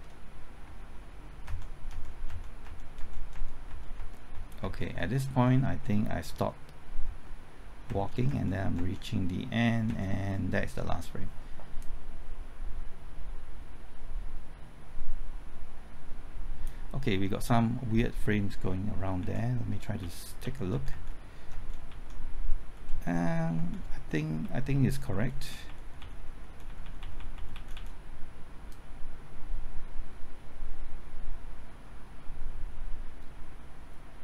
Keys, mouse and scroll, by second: 1.5 alt+Right, 1.9 alt+Right, 2.3 alt+Right, 2.6 alt+Right, 3.0 alt+Right, 9.9 alt+Right, 11.8-17.2 drag, 19.2-20.9 typing, 21.5 Right, 21.9 Left, 22.9 Right, 24.0 Left, 28.7-34.2 drag.